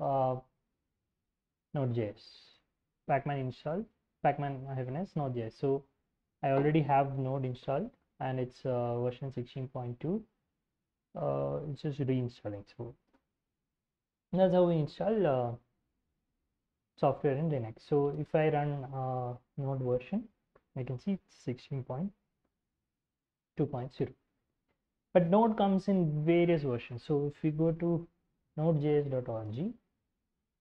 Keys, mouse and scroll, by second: 0.0-2.8 typing, 8.8-10.6 drag, 11.2-12.8 drag, 12.8 n, 13.0 Return, 17.5-18.8 typing, 21.4-24.7 drag, 27.3 alt+Tab, 27.9-29.8 typing.